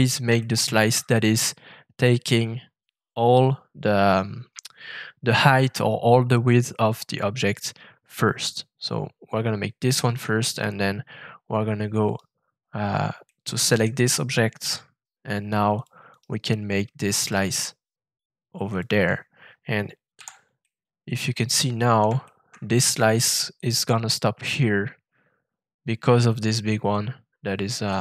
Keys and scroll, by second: 14.6 f, 20.1 shift+v.